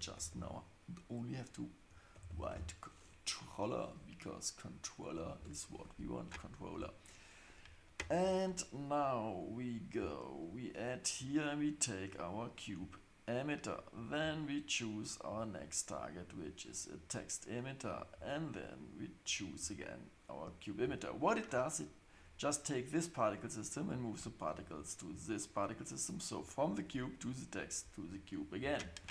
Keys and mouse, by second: 2.3 l, 11.1-12.5 drag, 13.9 click, 15.3-16.7 drag, 17.9-20.6 drag, 22.1 click, 27.5 click, 29.0 space.